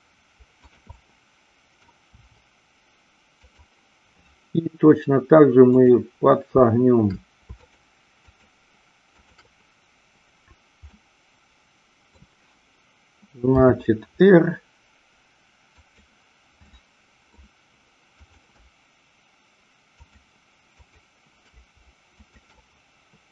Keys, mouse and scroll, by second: 0.6 click, 0.8-1.8 middle drag, 2.2 r, 3.4 click, 5.7-6.7 drag, 10.8-12.1 middle drag, 13.4 r, 15.7 click, 16.7 middle click, 18.1-19.2 drag, 22.2-23.2 shift+drag.